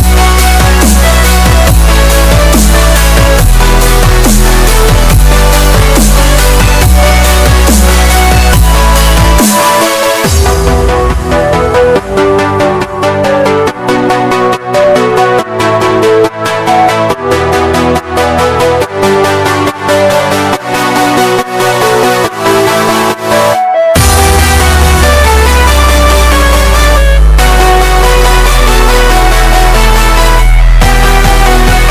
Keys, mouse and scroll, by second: 4.1-8.2 drag, 8.2 scroll up 1, 9.2 click, 9.9 click, 15.4 click, 15.7 typing, 16.7-20.0 drag, 22.2 click, 24.2 click, 25.7 scroll up 1, 26.4 scroll down 1, 26.8-27.2 scroll, 28.0 s, 29.5-31.9 drag.